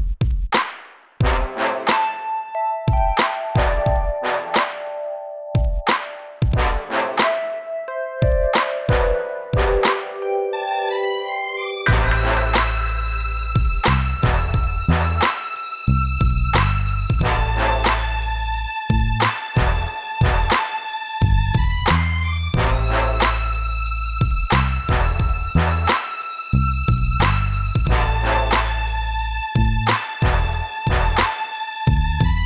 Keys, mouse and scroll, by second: 3.2 right click, 4.8 click, 5.7 scroll up 1, 6.7 click, 6.7 click, 8.2 click, 9.4 click, 9.6 click, 10.8 right click, 10.9 right click, 11.7 click, 13.3 click, 14.9 click, 16.8 click, 16.9 click, 18.4 click, 21.3 click, 21.8 click, 24.2 click, 26.1 click, 26.3 click, 27.6 click, 29.5 click, 29.7 click, 30.4 scroll up 1, 31.4 click.